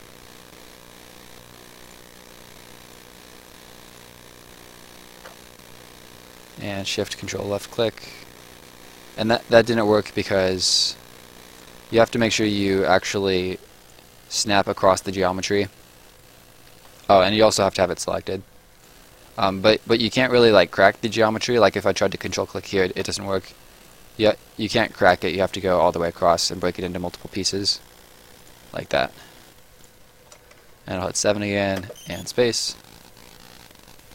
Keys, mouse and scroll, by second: 0.1 shift+click, 1.8 shift+click, 3.6 shift+click, 5.6 ctrl+shift+click, 7.7 ctrl+shift+click, 9.2 click, 9.7 shift+click, 15.0 ctrl+shift+click, 16.0 shift+click, 17.1 Escape, 17.6 click, 21.6 ctrl+click, 22.2 ctrl+click, 23.4 shift+click, 27.2 ctrl+shift+click, 28.7 shift+click, 29.3 Escape, 29.8 click, 31.0 7, 31.8 space, 32.6 right click.